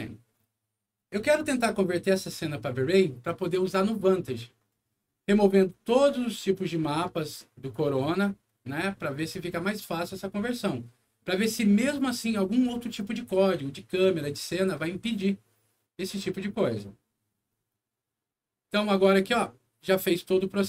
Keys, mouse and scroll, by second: 18.9 click.